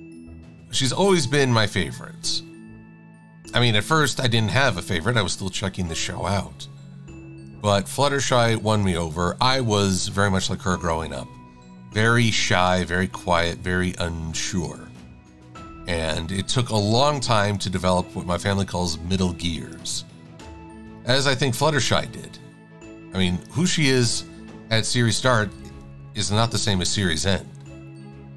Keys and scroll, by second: 8.3 v, 25.9 super+=.